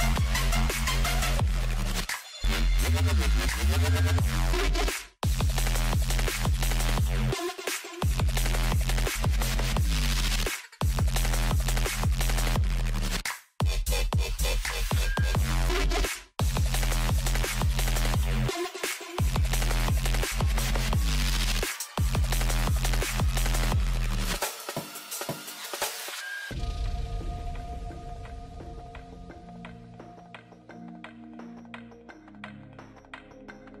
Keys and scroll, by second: 12.7 shift+d, 22.2 shift+d.